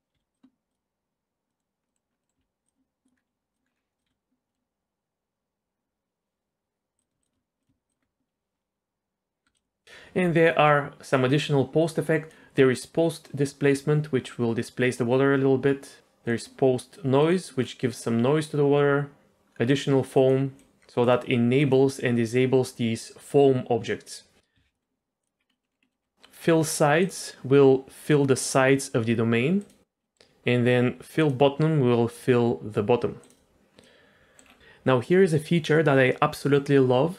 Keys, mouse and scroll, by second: 0.2 s, 0.7 click, 1.5 middle click, 1.9 middle click, 2.1 scroll up 2, 2.2 middle click, 2.4 z, 2.6 click, 3.1-3.9 scroll down 3, 3.5 click, 4.0 click, 4.5 middle click, 7.0 click, 7.2 shift+click, 7.6 alt+click, 9.4 space, 9.8 click, 12.3 click, 13.2-16.0 drag, 16.3 click, 17.2 click, 17.6-19.2 scroll up 1, 19.7 click, 20.1 click, 20.5 click, 20.7 shift+middle click, 21.0 click, 21.6 click, 24.5 z, 24.7 middle click, 25.2 click, 25.4-25.8 scroll down 2, 25.5 middle click, 25.8 middle click, 26.0-26.8 scroll up 1, 27.0 click, 29.6 click, 30.0 middle click, 31.2 click, 33.2 click, 33.8 middle click.